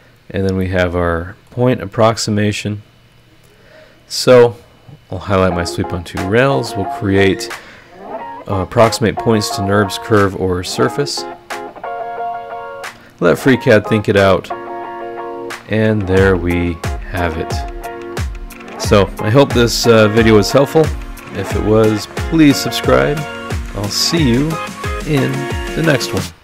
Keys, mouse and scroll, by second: 0.2 scroll down 1, 0.6 middle click, 0.7 scroll up 1, 0.7 right click, 1.7 scroll up 1, 5.0 click, 9.8 click, 16.1-20.0 drag, 16.1-20.0 right drag, 20.0 middle click, 20.1 click, 25.3 middle click.